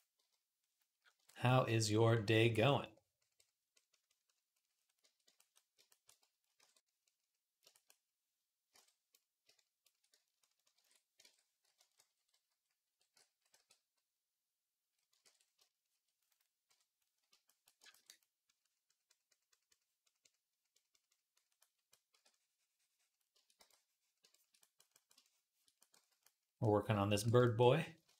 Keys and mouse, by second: 0.0 KP_1, 5.2-7.7 ctrl+drag, 6.4 alt+q, 8.6 ctrl+Tab, 10.6 ctrl+j, 11.0 ctrl+Tab, 11.9 t, 13.4 r, 15.1 ctrl+r, 16.5 KP_3, 17.6-26.9 ctrl+drag, 21.9 d, 23.4 v, 25.8 z, 27.9 ctrl+Tab.